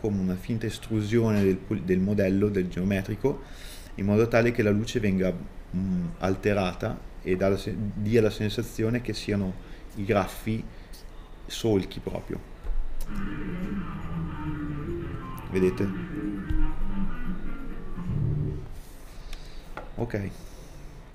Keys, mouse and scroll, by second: 14.3 KP_Enter, 14.9 middle click, 15.6 Return, 16.1 middle click, 17.1 middle click, 17.1 scroll down 2, 17.7 click.